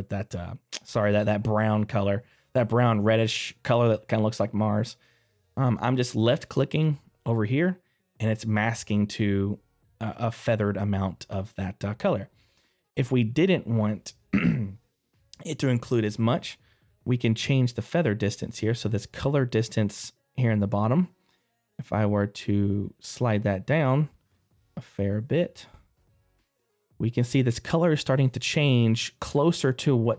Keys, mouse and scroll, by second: 17.8 click, 17.8-22.1 scroll down 2, 22.1 click, 26.9 middle click, 26.9 scroll down 1.